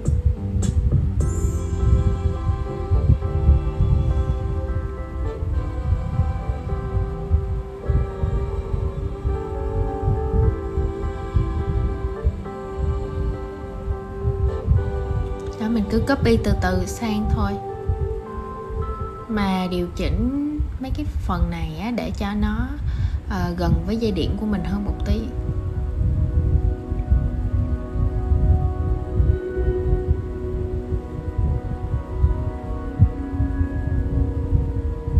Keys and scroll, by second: 15.2 super+z, 22.0 super+z.